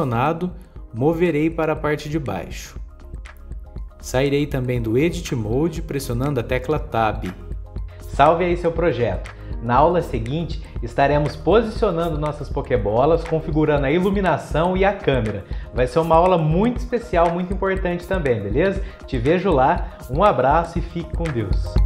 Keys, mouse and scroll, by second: 0.0-3.1 drag, 3.9 click, 4.9-6.4 middle drag, 6.4 Tab, 7.4 click.